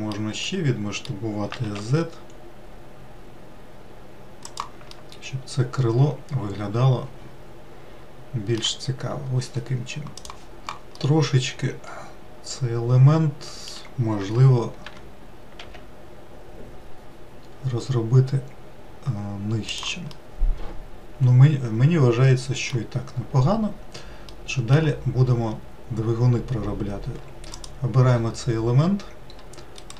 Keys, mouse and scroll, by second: 0.5-1.5 middle drag, 1.5 s, 4.9-8.0 middle drag, 11.2-14.2 middle drag, 15.1 g, 20.3-23.3 middle drag, 23.3 scroll down 1, 24.5-25.7 middle drag, 25.7-27.8 scroll up 1, 27.8 click.